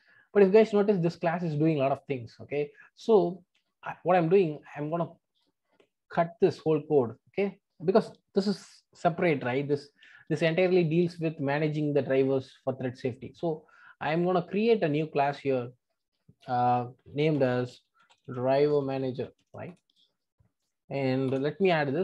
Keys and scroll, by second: 6.4 super+x, 16.5 super+n.